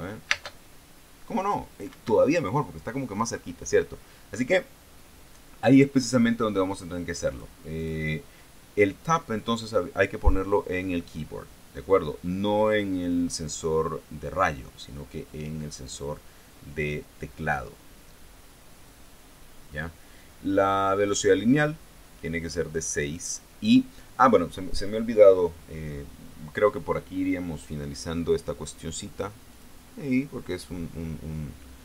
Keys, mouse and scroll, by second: 0.8 space, 2.4 Escape, 7.8 click, 8.3 click, 13.2 click, 19.4-21.8 drag, 29.2 click, 30.0 click.